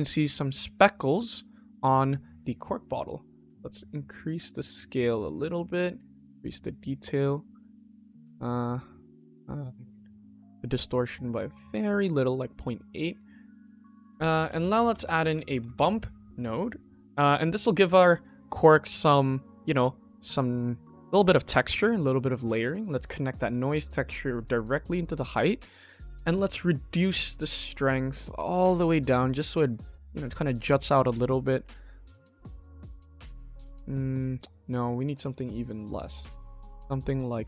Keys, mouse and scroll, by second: 0.8-2.1 shift+middle drag, 2.4-3.3 scroll up 3, 3.3-5.6 drag, 5.9-7.3 drag, 8.1-11.8 drag, 12.2 middle click, 12.6 scroll down 2, 13.0 shift+middle click, 13.6 ctrl+s, 13.9 shift+middle click, 14.2 shift+a, 16.9-17.4 drag, 17.8 click, 23.0-24.8 drag, 26.5-30.7 drag, 31.5 middle click, 34.5-36.2 drag.